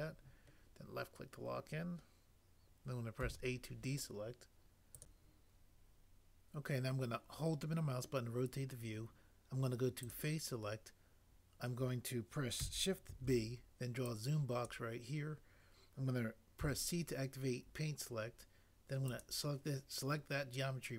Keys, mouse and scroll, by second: 3.2 a, 13.1 b, 16.6 c.